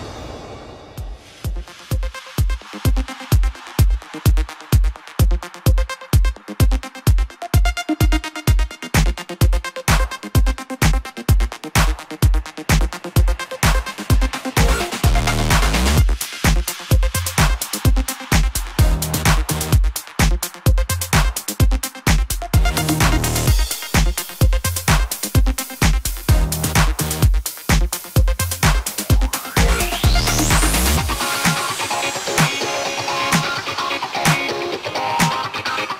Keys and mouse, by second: 1.6-4.5 drag, 7.5-8.1 drag, 8.2 click, 8.9 u, 9.6 y, 10.2-11.1 drag, 11.2 click, 11.5-12.4 drag, 12.4-12.9 middle drag, 13.0-14.4 middle drag, 14.5 drag, 14.8 s, 19.3 click, 19.4-20.1 middle drag, 20.1-23.2 drag, 25.2 y, 25.8-28.6 drag, 30.8-31.1 drag, 31.3-35.9 drag, 32.2 s.